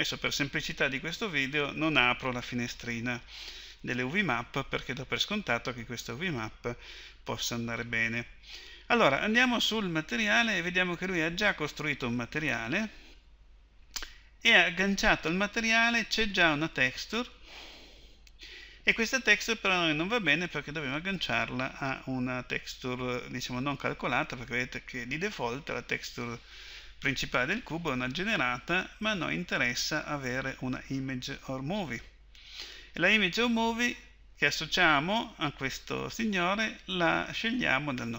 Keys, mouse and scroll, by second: 10.2-17.9 drag, 21.1-27.9 drag, 29.8-32.1 drag, 38.1 click.